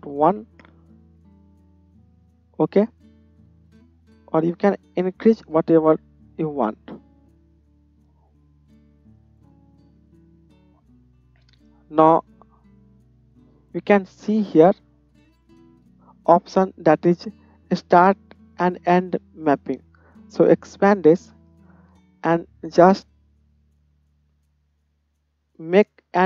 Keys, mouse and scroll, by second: 2.2-4.2 middle drag, 4.2-8.5 drag, 8.5-19.5 middle drag, 19.5-26.2 drag.